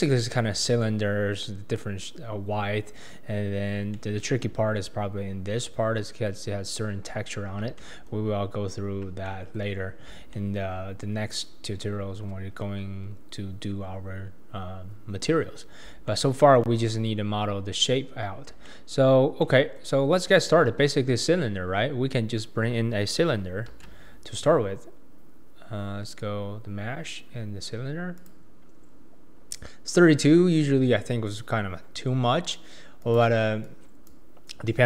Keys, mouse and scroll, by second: 0.0-2.8 shift+middle drag, 4.0-4.5 shift+middle drag, 7.8-13.3 shift+middle drag, 14.0-22.7 middle drag, 34.7 click.